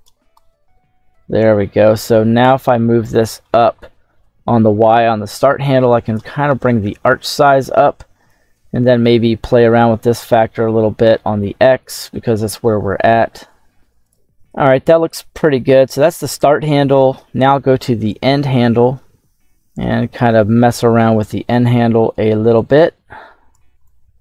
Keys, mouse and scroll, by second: 0.2-2.3 drag, 2.6 middle click, 4.8-6.0 drag, 6.6-7.7 scroll down 3, 8.2-10.1 drag, 17.6-20.8 drag, 22.5 click, 23.7 click.